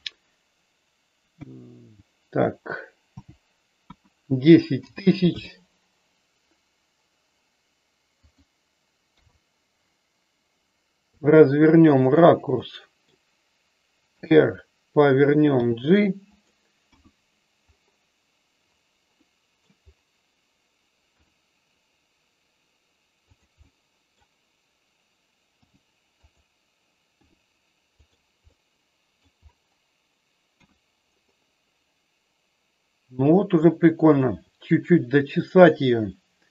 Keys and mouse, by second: 8.2 click, 9.1 KP_3, 11.1 r, 12.0 click, 12.5 middle click, 14.2 r, 14.9 click, 15.6 g, 16.2 click, 16.9 KP_1, 19.2 middle click, 21.1 r, 23.6 middle click, 25.5 g, 27.2 r, 28.0 click, 28.5 middle click, 29.0 middle click, 30.5 KP_1.